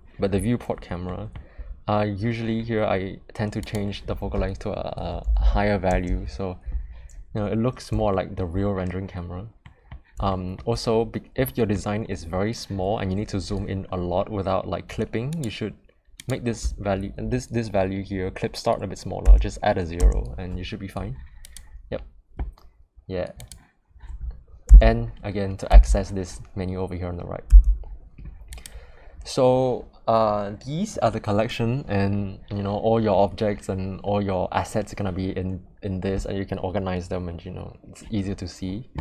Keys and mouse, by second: 1.0 middle click, 3.5-6.9 drag, 5.3 0, 8.0 shift+middle drag, 9.6 middle click, 10.2 shift+middle drag, 11.4 middle click, 15.3-21.0 drag, 21.4 click, 23.3 click, 24.6 n, 25.7 n, 27.4 n, 28.5 click.